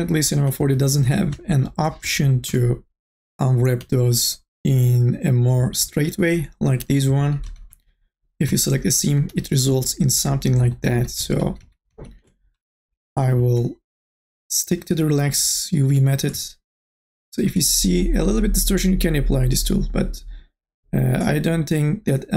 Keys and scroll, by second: 0.6 e, 2.5 2, 3.8 3, 7.5 ctrl+z, 9.3 e, 11.0 ctrl+z.